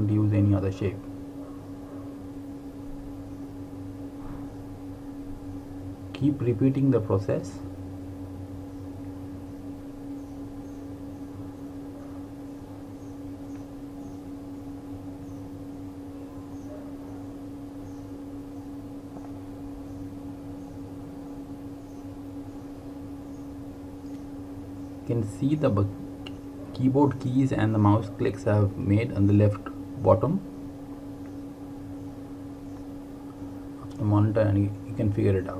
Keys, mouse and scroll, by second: 0.1-1.6 typing, 3.6 typing, 5.5 click, 12.5 r, 14.6 alt+click, 17.1-18.7 typing, 20.6 typing, 22.8 click, 31.9 r, 34.0 click.